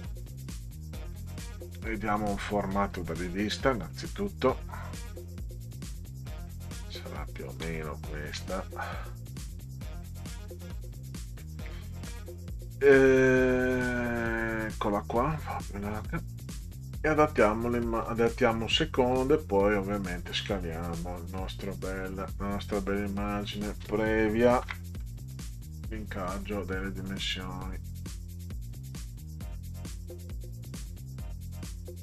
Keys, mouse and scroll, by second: 0.6-3.0 drag, 3.4 middle click, 5.2-6.3 drag, 7.8 ctrl+scroll down 2, 9.6-10.8 drag, 13.3 click, 15.6 click, 18.0 click, 19.1 click, 22.1 click, 24.6 ctrl+x, 25.3 click, 26.8-28.1 drag, 30.1 click.